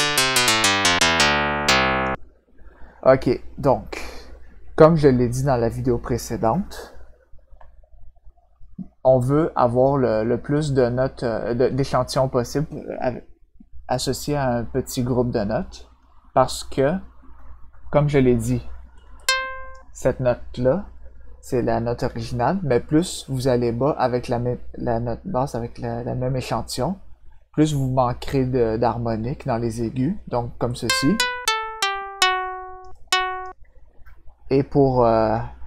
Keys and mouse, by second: 19.1 click, 30.7-32.7 drag, 32.9 click.